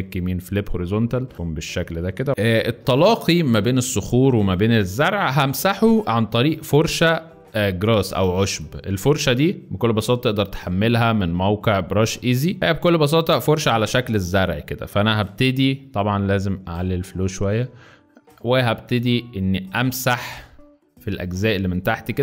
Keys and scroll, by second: 1.3 shift+space, 2.3 z, 2.9 z, 4.6 z, 6.1 b, 12.6 space, 17.8 [, 18.0 [, 18.2 [.